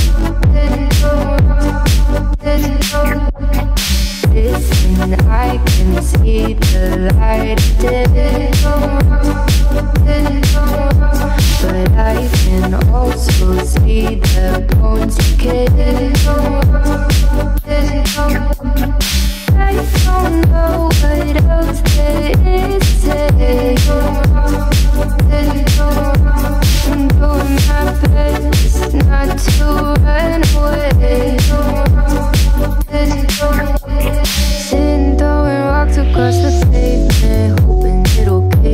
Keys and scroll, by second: 23.4 Right, 24.4 Right, 25.4 Left, 33.9 Left, 38.1 Left.